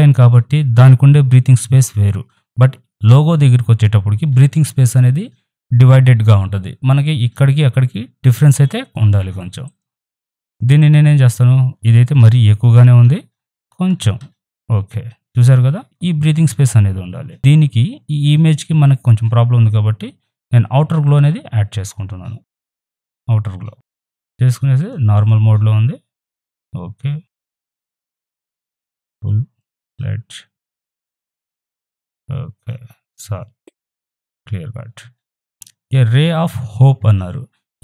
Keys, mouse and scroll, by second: 9.3 right click, 9.6 click, 10.2 right click, 10.4-13.0 drag, 13.0 shift+Down, 13.6 Up, 21.0 click, 23.1 click, 24.7 click, 27.4-34.2 drag.